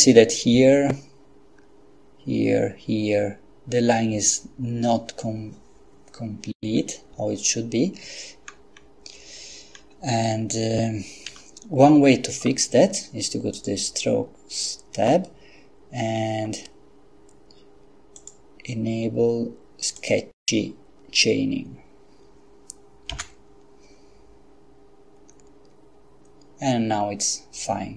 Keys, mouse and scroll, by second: 8.5-9.1 scroll down 2, 9.7-10.2 scroll down 2, 11.3 Escape, 13.5 click, 18.2 click, 20.1 click, 23.1 F12.